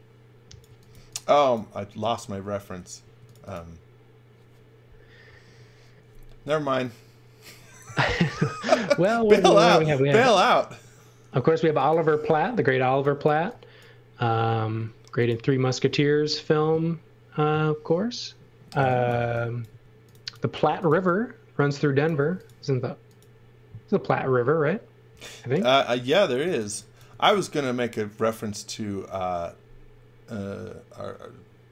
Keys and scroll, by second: 0.6 x, 0.9 v, 3.0 space, 8.1 m, 12.8 x, 13.3 v, 14.7 space, 18.7-22.1 typing, 26.2 x, 26.6 v, 27.1 x.